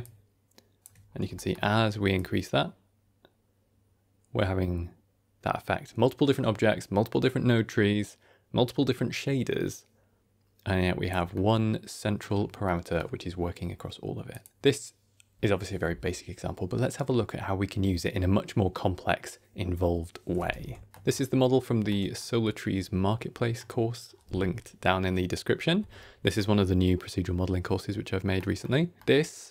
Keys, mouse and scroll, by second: 0.9 scroll down 2, 1.3 shift+middle click, 2.0-11.0 shift+drag, 11.0 shift+middle click, 11.2 ctrl+middle click, 12.5 middle click, 14.2 click, 20.8 ctrl+s, 21.0 ctrl+middle click, 21.9 ctrl+scroll down 1, 22.0 scroll up 1, 22.1-23.6 middle drag, 26.2-28.3 middle drag, 28.5-29.5 shift+middle drag, 28.9 shift+scroll down 1.